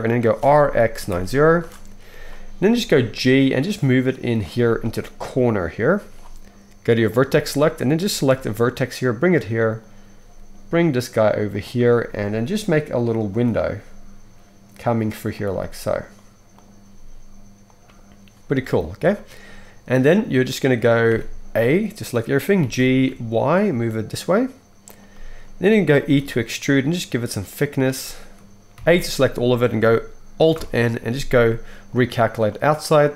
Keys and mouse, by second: 0.4 r, 2.7 g, 7.0 middle click, 7.9-15.9 right drag, 8.3 g, 10.2 g, 12.1 g, 13.3 click, 13.3 middle click, 13.7 g, 15.5 g, 15.9 click, 16.5 middle click, 16.5 right click, 16.8 click, 16.8 g, 17.6-19.0 right drag, 19.0-24.2 shift+middle drag, 21.0 a, 22.6 g, 24.2-29.9 right drag, 26.2 e, 28.7 a, 29.9-33.1 alt+middle drag, 30.5 alt+n.